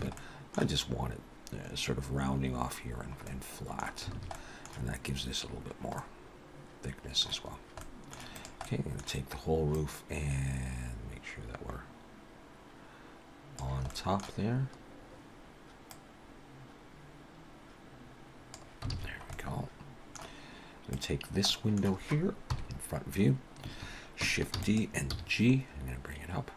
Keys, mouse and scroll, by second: 0.0 Tab, 0.2 middle click, 1.7-2.0 scroll up 2, 2.9-3.3 scroll down 3, 3.3 middle click, 4.1 alt+a, 4.3 middle click, 5.9 middle click, 7.8 middle click, 8.4 click, 8.6 middle click, 9.8 click, 13.9 middle click, 14.4-14.8 scroll up 2, 15.9 click, 18.9 alt+a, 19.0-20.0 scroll down 3, 19.3 middle click, 20.9 click, 21.5 middle click, 22.5 KP_1, 23.2-23.6 scroll up 2, 24.6 shift+d, 25.1 g.